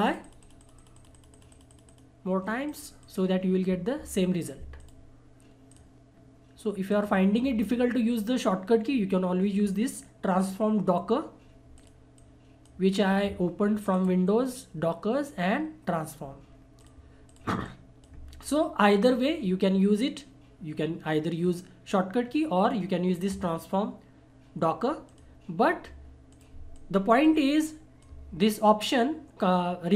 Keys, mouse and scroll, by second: 11.7-15.0 drag, 16.8-21.3 drag, 25.0-29.9 drag.